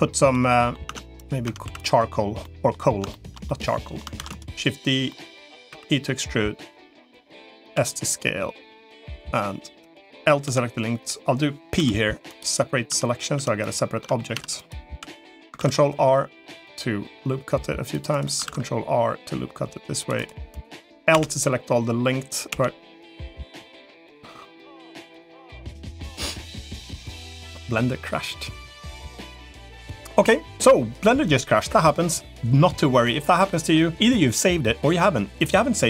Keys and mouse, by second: 0.4 middle click, 0.8 Tab, 1.0 click, 1.4 Tab, 1.6 3, 2.4 middle click, 3.0 shift+middle click, 3.4 middle click, 4.0 shift+d, 5.0 middle click, 5.6 e, 7.2 middle click, 7.6 s, 10.4 l, 11.6 p, 12.8 Tab, 13.2 Tab, 13.8 Tab, 14.2 Tab, 14.4 click, 14.8 l, 15.4 ctrl+r, 18.4 ctrl+r, 20.4 click, 29.9 Tab.